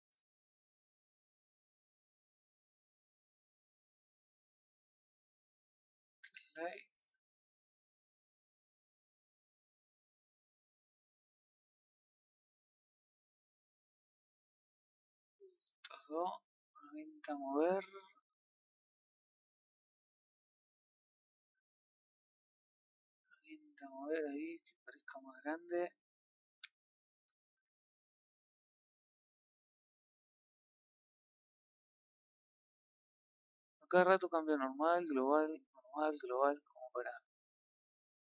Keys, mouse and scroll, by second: 0.4-1.9 middle drag, 1.9 click, 5.1 click, 13.1-14.7 middle drag, 14.7 click, 15.2 shift+click, 17.8 click, 18.9 click, 20.5 shift+click, 21.3 shift+click, 22.1 click, 24.0-27.0 middle drag, 27.2-27.6 scroll up 1, 27.6 middle click, 28.2 click, 30.1 middle click, 31.4-33.9 middle drag, 33.9 click, 36.5-38.0 middle drag, 38.0 click.